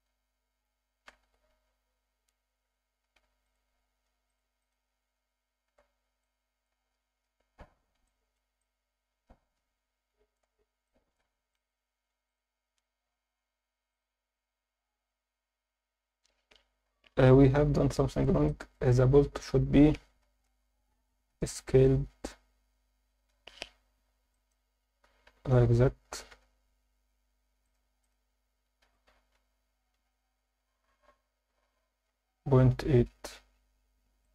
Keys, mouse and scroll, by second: 1.1 shift+d, 1.5 z, 3.1 9, 3.2 0, 3.5 click, 4.3 drag, 4.6 click, 5.9 scroll down 2, 6.1 scroll up 1, 6.2-6.6 alt+middle drag, 6.9-7.3 scroll up 3, 8.1 alt+shift+middle drag, 8.6-10.3 alt+middle drag, 10.8 alt+shift+middle drag, 11.5 ctrl+alt+middle drag, 12.3 click, 13.9 click, 14.4 scroll down 2, 16.0 scroll up 2, 16.8 KP_7, 17.9 alt+shift+middle drag, 18.5 ctrl+alt+middle drag, 19.0 Tab, 20.3 ctrl+KP_Add, 20.8 ctrl+KP_Add, 22.3 ctrl+KP_Add, 23.9-24.3 scroll up 2, 24.3 alt+shift+middle click, 25.1 s, 25.4 shift+z, 26.3 Escape, 27.6 click, 28.8 s, 29.1 shift+z, 34.2 click.